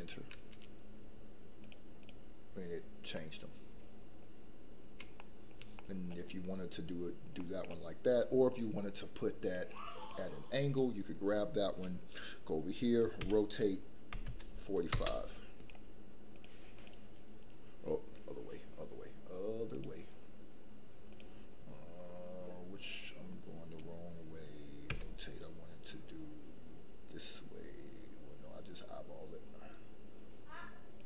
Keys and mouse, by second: 1.6 click, 3.1-4.2 middle drag, 5.1-5.5 shift+middle drag, 5.7 middle click, 7.3 middle click, 9.4-10.1 drag, 10.6 click, 13.1 r, 14.1 KP_4, 14.2 KP_5, 14.9 KP_Enter, 16.5 click, 19.8-21.2 drag, 24.8 r, 30.9 click.